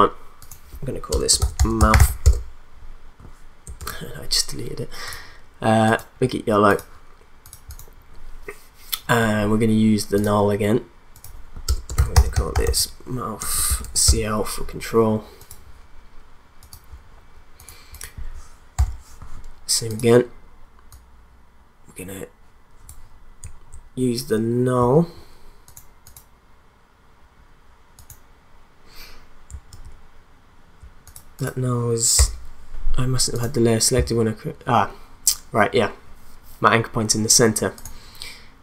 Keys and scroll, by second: 1.1 Return, 1.1-2.5 typing, 3.8 ctrl+z, 11.7 Return, 11.7-14.3 typing, 18.8 p, 24.8 v, 29.7 ctrl+z, 32.2 BackSpace.